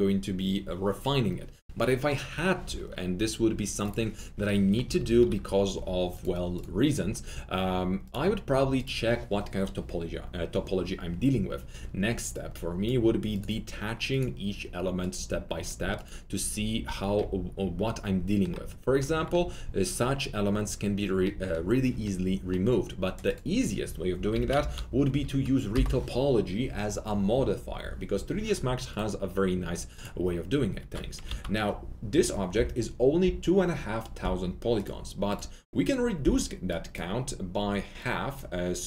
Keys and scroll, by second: 4.8 F3, 4.9-5.6 typing, 16.5 typing, 16.8 alt+q, 21.1 alt+q, 24.1-26.1 typing, 31.2 ctrl+a.